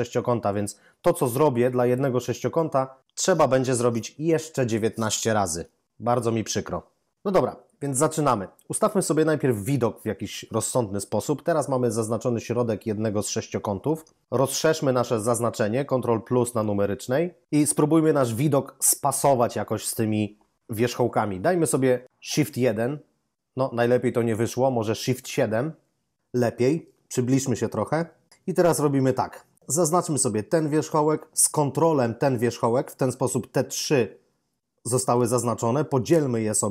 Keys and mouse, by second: 1.7 right click, 16.3 ctrl++, 22.5 shift+1, 25.3 shift+7, 30.4 right click, 31.7 ctrl+right click.